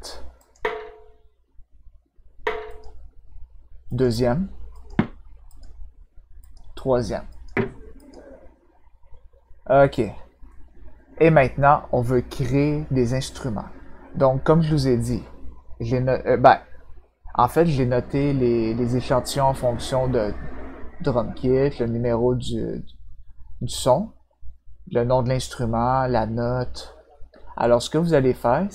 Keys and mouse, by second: 0.3 click, 2.6 click, 3.8 click, 4.7 click, 5.4 click, 6.4 click, 7.3 click, 7.9 click.